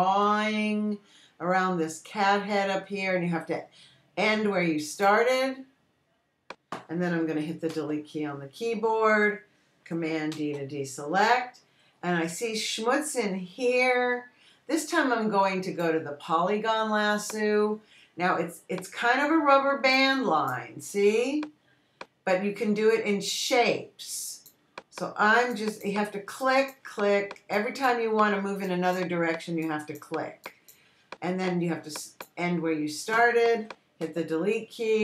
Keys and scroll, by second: 9.2 BackSpace, 11.8 super+d.